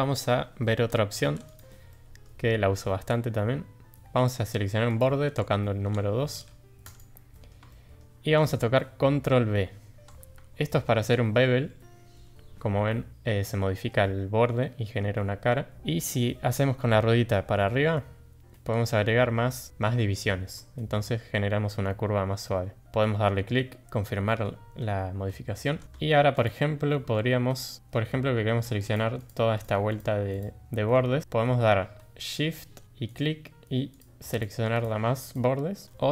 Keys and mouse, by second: 1.2 2, 1.5 click, 1.9-2.2 middle drag, 4.9 click, 6.9 click, 7.3 middle click, 7.7 shift+middle drag, 10.7 ctrl+b, 23.8-24.4 middle drag, 25.8 shift+middle click, 26.4 click, 26.9 middle click, 27.8 middle click, 29.3 click, 30.6-30.9 middle drag, 34.3 shift+click, 35.2 shift+click.